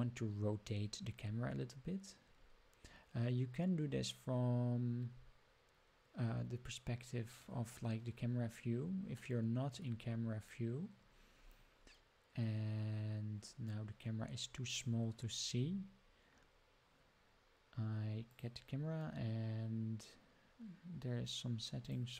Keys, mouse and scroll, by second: 1.6 scroll down 2, 2.3-2.8 scroll up 3, 3.8 scroll down 1, 8.7 scroll down 2, 9.1-9.8 middle drag, 9.8 scroll up 1, 10.0-10.5 scroll down 6, 11.1 scroll down 2, 11.3-11.7 scroll up 7, 12.8 scroll down 2, 14.6 click, 18.2 click, 21.8 click.